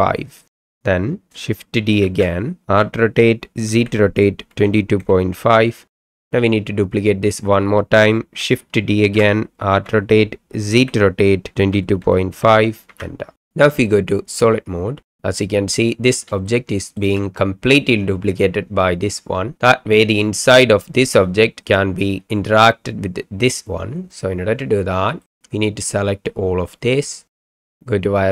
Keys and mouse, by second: 0.5 KP_Enter, 2.0-5.3 typing, 5.9 KP_Enter, 9.0-12.3 typing, 12.9 KP_Enter, 14.3 click, 15.1-15.9 middle drag, 16.4-17.0 shift+middle drag, 25.3-26.8 middle drag, 27.4 click.